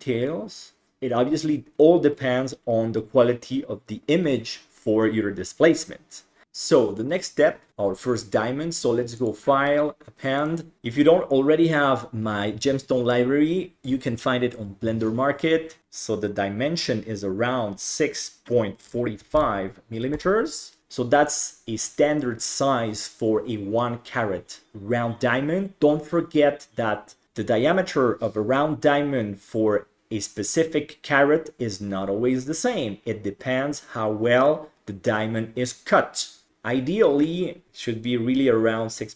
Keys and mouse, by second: 9.2-10.5 drag, 15.8-20.2 drag, 20.8-21.9 middle drag.